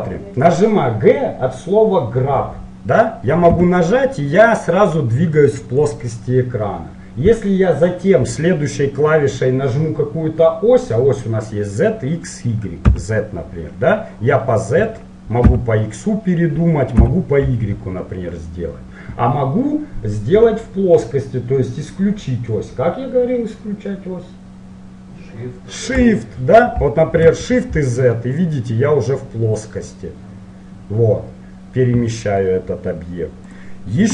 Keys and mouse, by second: 3.6 g.